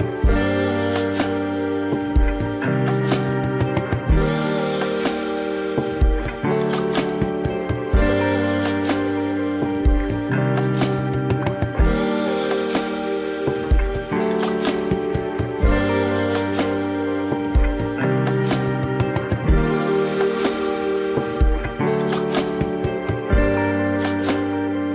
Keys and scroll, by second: 0.4 space, 7.7 ctrl+d, 16.6 ctrl+=, 16.7 ctrl+-.